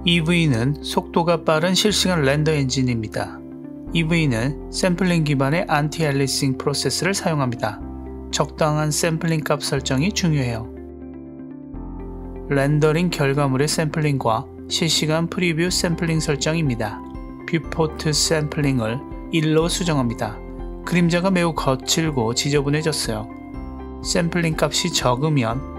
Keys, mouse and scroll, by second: 15.8-18.1 drag, 20.5-20.9 scroll up 1, 23.3-24.0 shift+middle drag.